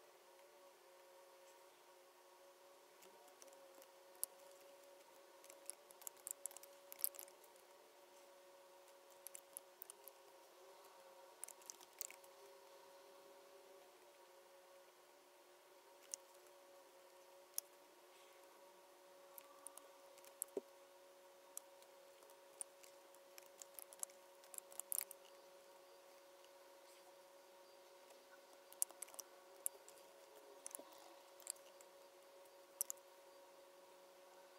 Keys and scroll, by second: 4.1 super+9, 4.2 super+F9, 4.8 BackSpace, 9.8 super+9, 9.8 super+F9, 10.3 Right, 22.5 super+F9, 29.5 super+F9, 29.9 Right.